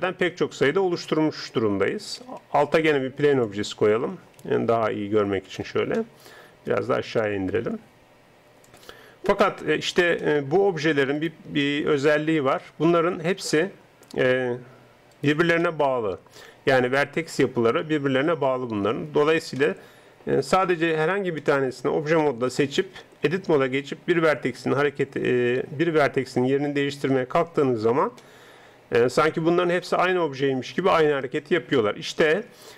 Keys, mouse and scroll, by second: 2.5 shift+a, 4.4 s, 5.9-7.2 middle drag, 7.2-8.9 drag, 8.9-12.9 middle drag, 12.9 click, 13.2 Tab, 13.7-15.1 middle drag, 15.1 right click, 17.7 g, 19.6 middle click, 21.1 Tab, 22.6 right click, 23.3 Tab, 25.0 g, 27.9 middle click, 28.6 middle click, 29.3 middle click, 29.7 middle click.